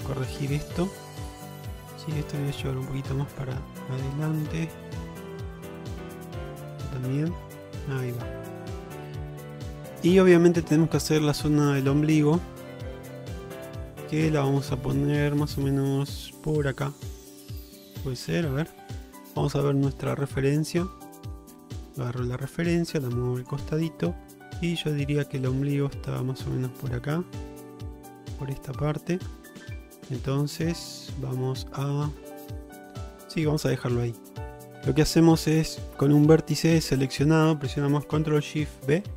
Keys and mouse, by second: 0.3 click, 0.6 middle click, 2.4 click, 4.0 click, 5.0 middle click, 5.5 click, 6.2 click, 7.3 shift+middle click, 8.0 shift+middle click, 8.4-10.1 middle drag, 10.6 middle click, 11.6 shift+middle click, 13.1 shift+middle click, 14.1 click, 16.5 click, 18.3 shift+middle click, 19.0 Tab, 20.6 click, 21.2 click, 21.7 shift+middle drag, 22.4-23.6 drag, 29.7 ctrl+z, 30.5 shift+middle click, 31.2 Tab, 32.8 shift+middle click, 34.3 shift+middle click, 39.0 ctrl+shift+b.